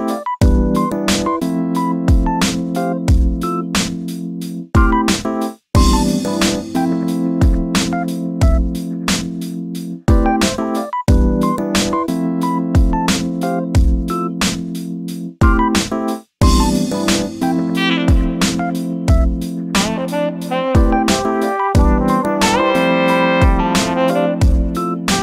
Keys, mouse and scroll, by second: 0.9 s, 2.8 g, 4.9 ctrl+shift+b, 8.8 click, 10.9 shift+d, 13.2 shift+middle click, 13.9 click, 14.7 g, 16.7 scroll down 3, 16.9 shift+middle click, 17.3 scroll down 3, 17.7 click, 18.6 shift+d, 20.5 shift+middle click, 21.0 shift+d, 23.7-25.2 shift+middle drag.